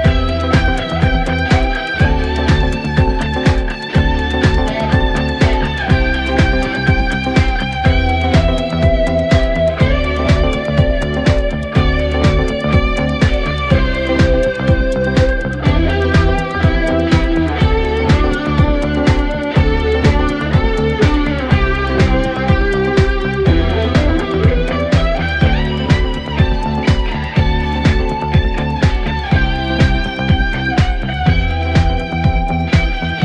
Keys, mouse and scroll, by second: 0.6-1.8 scroll up 2, 1.8 s, 5.0 KP_7, 6.6-7.2 drag, 7.2-7.9 scroll up 2, 7.9 s, 13.1-13.5 drag, 13.5 scroll down 1, 13.6-16.0 middle drag, 16.0-16.8 scroll up 1, 16.8 s, 18.9-19.5 scroll down 4, 19.5-22.3 middle drag, 22.3-23.0 scroll up 1, 23.0 KP_1, 25.3 click, 25.8-26.4 scroll up 1, 26.4-27.7 scroll up 1, 27.7-29.3 scroll down 1, 29.3 shift+d.